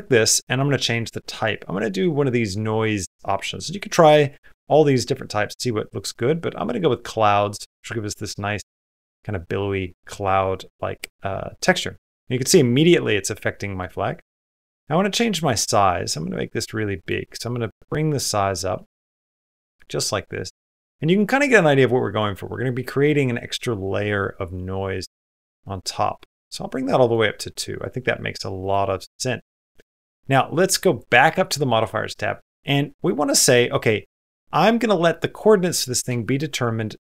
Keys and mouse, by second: 12.3-13.6 middle drag, 14.9-17.0 drag, 17.3-18.8 drag, 19.3-21.1 middle drag, 21.3 middle click, 21.8 middle click, 22.3 middle click, 24.8-26.1 drag, 27.4 click, 28.4 click, 30.0 click, 33.3 click, 35.6 middle click, 36.1 shift+middle click, 36.3 middle click.